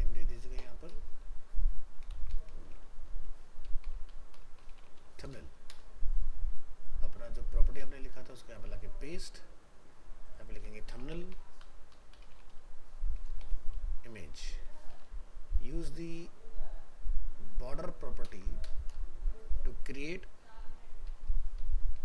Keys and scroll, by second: 2.1 ctrl+shift+Left, 7.8 ctrl+v, 18.3 ctrl+BackSpace, 21.1 ctrl+Right.